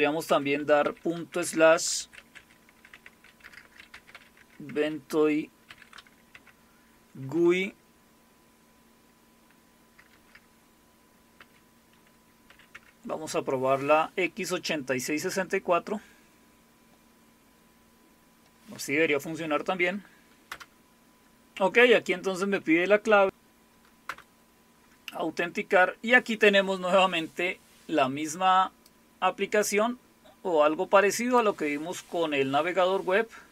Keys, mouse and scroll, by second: 0.3-4.6 typing, 2.9 Tab, 5.7 shift+g, 6.3 Tab, 10.1 BackSpace, 11.4 ., 12.5 x, 12.7 Tab, 20.5 Return, 24.0 Return, 28.8-31.4 drag.